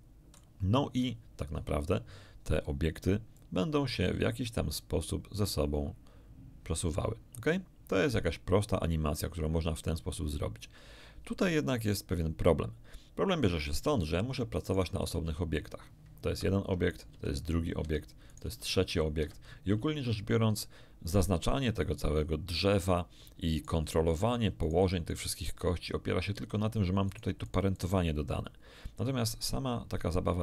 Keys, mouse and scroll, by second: 3.3-13.6 drag, 14.6 right click, 15.2 g, 16.3 Escape, 16.9 right click, 17.1 g, 17.7 Escape, 18.3 right click, 18.4 g, 19.1 Escape, 23.5 right click, 24.1 right click, 24.6 right click, 25.1 right click, 27.0 right click.